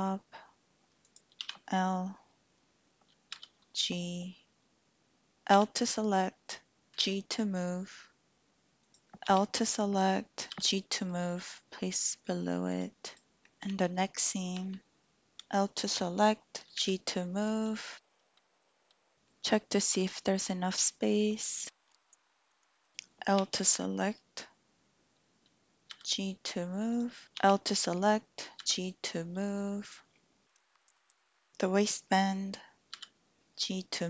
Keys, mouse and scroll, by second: 1.0 click, 1.4 l, 3.3 g, 5.3 l, 6.9 g, 8.8 click, 9.1 l, 10.5 g, 12.7 click, 13.1 click, 13.7 l, 16.8 g, 18.3 shift+click, 18.7 shift+click, 19.1 click, 21.9 g, 22.5 shift+click, 22.8 shift+click, 22.9 Escape, 23.2 l, 25.9 g, 26.9 click, 27.2 Escape, 27.2 g, 27.4 l, 28.6 g, 29.8 click, 30.5 shift+middle click, 31.1 l, 31.1 g, 31.2 click, 32.9 g.